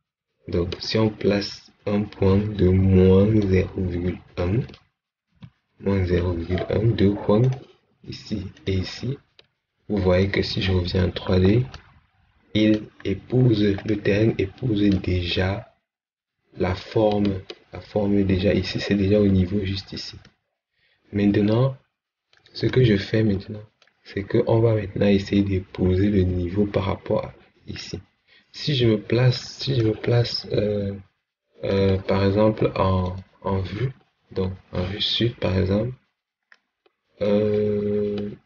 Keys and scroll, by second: 5.2 1.